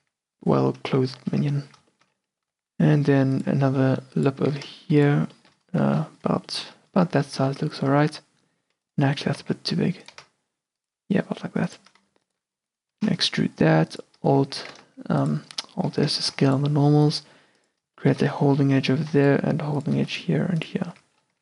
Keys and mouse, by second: 0.1 q, 1.5 q, 2.5 e, 3.6 s, 4.6 s, 7.2 g, 8.0 a, 9.3 g, 10.3 s, 12.4 click, 12.7 e, 13.1 alt+s, 14.7 g, 16.2 a, 16.4 ctrl+r, 18.1 click, 18.9 a, 19.2 ctrl+r, 20.1 ctrl+r, 21.0 Tab.